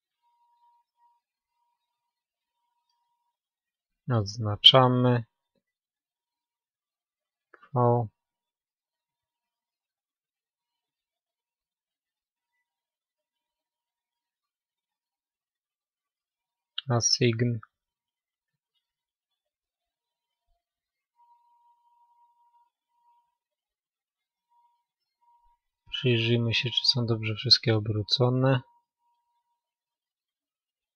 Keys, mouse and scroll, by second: 3.7-8.6 middle drag, 16.9-24.1 middle drag, 17.1 click, 17.2-25.3 drag, 24.7-26.4 middle drag, 27.7 a.